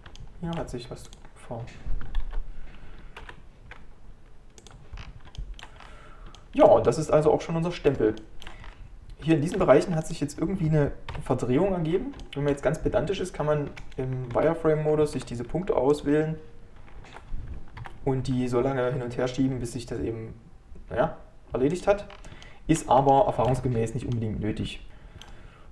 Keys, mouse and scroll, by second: 0.2 shift+middle click, 1.1-4.7 drag, 5.0-5.4 scroll down 5, 5.4 shift+middle click, 5.8-6.4 scroll up 3, 6.4-8.7 shift+middle drag, 8.7 scroll up 4, 9.3 shift+middle click, 9.8 3, 11.1 KP_Decimal, 11.9 scroll down 1, 12.2-14.4 shift+middle drag, 14.4 alt+z, 17.1 alt+z, 17.8 KP_7, 18.9 g, 22.1-22.5 scroll down 4, 22.5-25.7 shift+middle drag.